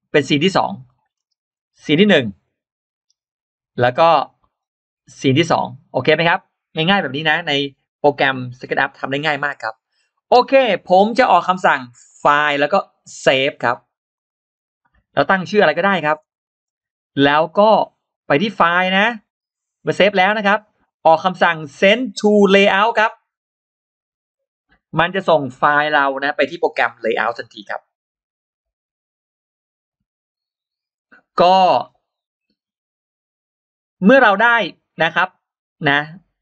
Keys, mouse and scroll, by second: 0.7 middle click, 1.6 click, 2.3 click, 5.1 click, 14.0 click, 18.4 Return, 18.4-22.9 drag, 18.4 d.